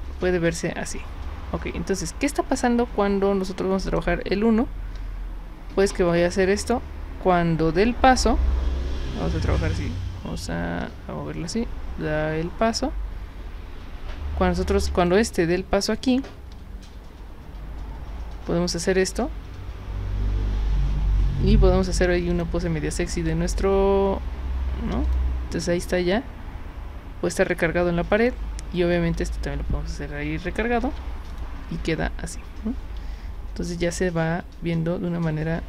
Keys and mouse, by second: 3.9 click, 15.0 click, 22.3 click, 25.0 click, 28.2 click, 30.8 z, 31.3 click, 33.0-35.6 typing.